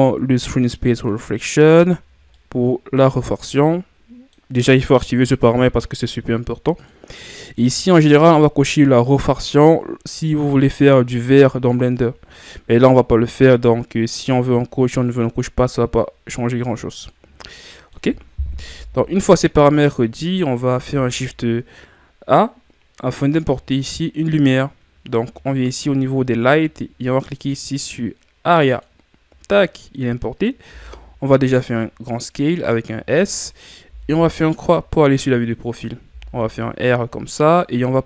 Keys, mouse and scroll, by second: 1.1 click, 2.4-14.5 middle drag, 14.5 click, 15.0 click, 17.4 scroll down 2, 17.7-18.8 middle drag, 18.8 KP_1, 30.7 s, 33.9 KP_3, 36.1 r.